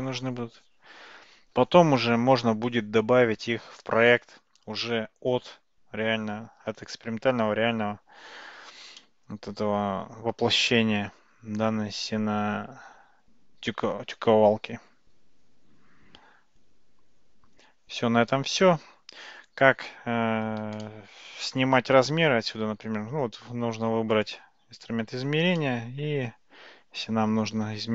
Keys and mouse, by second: 9.0-18.9 middle drag, 20.8-22.0 shift+middle drag, 24.2 click, 25.6-26.1 middle drag.